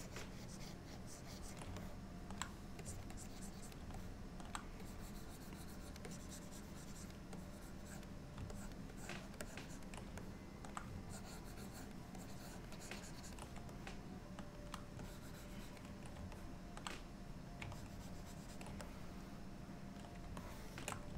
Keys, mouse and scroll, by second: 1.9 middle click, 2.9 click, 3.2 click, 4.1 middle click, 4.9 click, 6.1 click, 7.4 click, 8.6 ctrl+click, 9.0 ctrl+click, 9.5 ctrl+click, 10.3 middle click, 11.1 ctrl+click, 12.2 ctrl+click, 12.8 ctrl+click, 13.8 middle click, 15.1 ctrl+click, 16.4 middle click, 17.8 ctrl+click, 18.9 middle click, 20.5 shift+middle click.